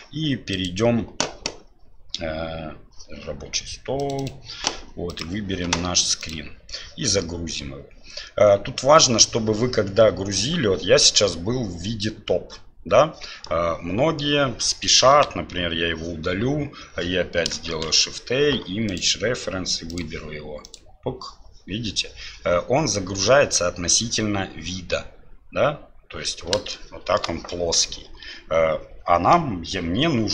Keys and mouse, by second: 13.4-14.2 drag, 13.4-14.2 right drag, 15.1 Delete, 17.7 shift+a, 26.7 shift+middle click.